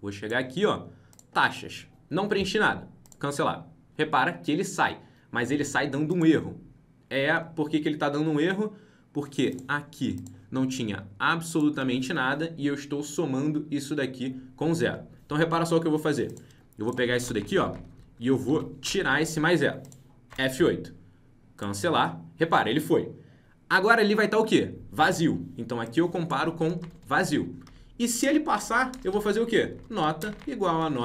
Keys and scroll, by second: 3.1 alt+Tab, 20.2 F8.